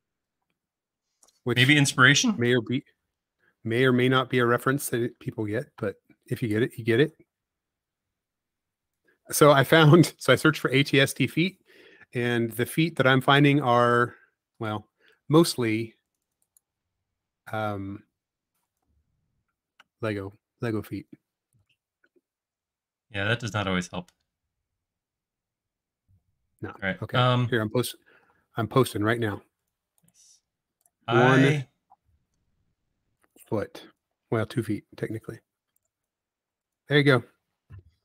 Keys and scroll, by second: 0.1 super+s, 12.2 space, 17.1 shift+q, 18.0 e, 20.4-21.2 typing, 32.3 e, 35.7 e, 36.5 space.